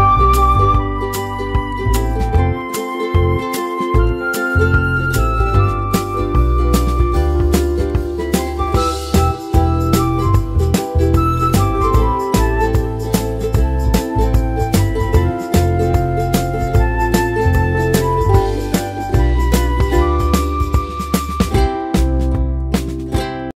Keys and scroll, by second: 1.6-2.9 typing, 10.2 Delete.